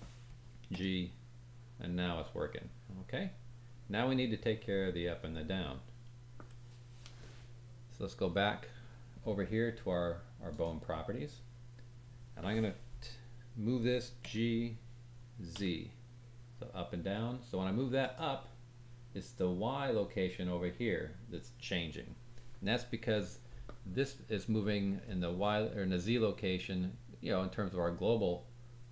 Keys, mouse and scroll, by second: 0.6 g, 10.5-12.9 drag, 14.2 g.